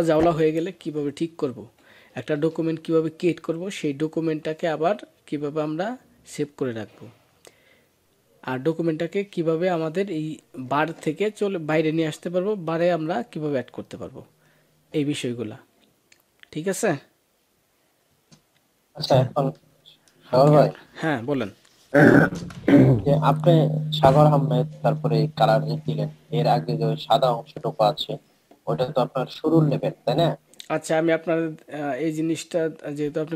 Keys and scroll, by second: 22.1 ctrl+s.